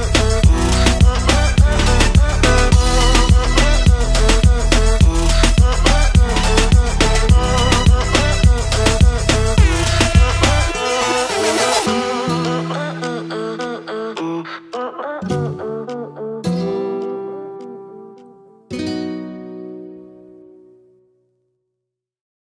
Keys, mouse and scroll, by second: 2.0 click, 3.2 click, 4.8 click, 7.7 click, 11.8 click, 15.6 click, 16.7 click.